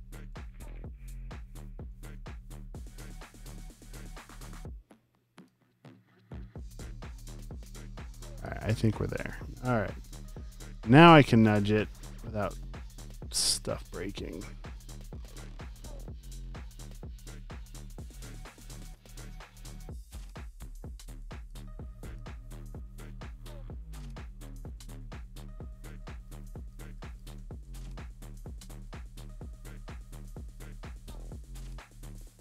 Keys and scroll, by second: 0.7 Down, 1.3 shift+Down, 2.4 Left, 3.2 Down, 3.5 Right, 7.9 space, 8.4 alt+super+space, 9.8 super+;, 10.0 v, 10.5 super+d, 10.7 space, 18.6-21.6 typing, 26.0 space, 26.6 super+space, 27.4 super+t.